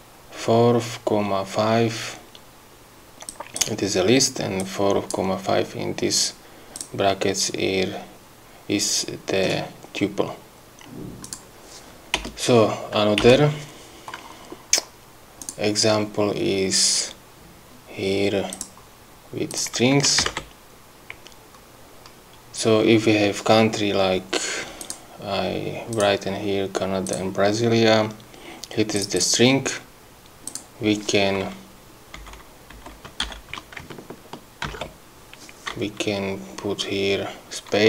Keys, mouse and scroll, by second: 3.3 click, 4.6 click, 6.7 click, 11.2 click, 12.2 Return, 13.2 Return, 15.4 click, 18.5 click, 20.2 ctrl+v, 22.1-24.8 scroll down 2, 24.8 click, 25.9 click, 27.0 click, 28.9 click, 30.5 click, 32.2 Right, 32.7 Left, 33.2 shift+End, 34.7 ctrl+x.